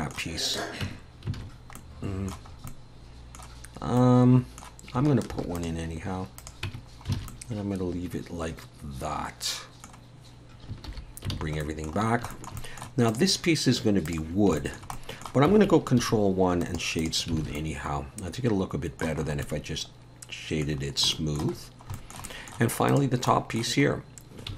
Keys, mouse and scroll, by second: 0.5 click, 0.8 Tab, 1.4 alt+a, 1.8 middle click, 2.5 scroll up 1, 2.7 middle click, 4.0 middle click, 5.3 ctrl+r, 6.7 Tab, 6.8 scroll down 3, 7.2 alt+a, 7.3 middle click, 10.9 alt+h, 11.3 alt+a, 11.6 middle click, 12.0-12.3 scroll down 3, 12.3 shift+middle click, 12.6 middle click, 13.1 click, 14.1 click, 14.6 shift+middle click, 14.9 middle click, 16.0 ctrl+1, 16.6 right click, 17.4 alt+a, 17.6 middle click, 19.2 scroll up 3, 19.5 middle click, 20.8 scroll down 3, 21.1 shift+middle click, 22.2 middle click, 22.3 middle click, 22.9 click, 23.3 middle click, 23.9 scroll up 1.